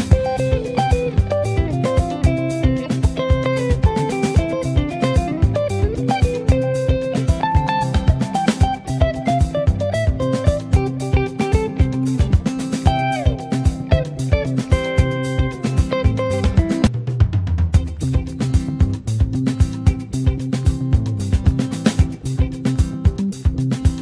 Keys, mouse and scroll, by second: 1.8 click, 2.6 shift+middle click, 2.7-3.0 scroll up 1, 3.5 space, 4.1 space, 4.9 click, 6.4 ctrl+z, 6.8 space, 7.4 space, 8.3-10.8 middle drag, 10.8-17.7 drag, 19.2-24.0 drag.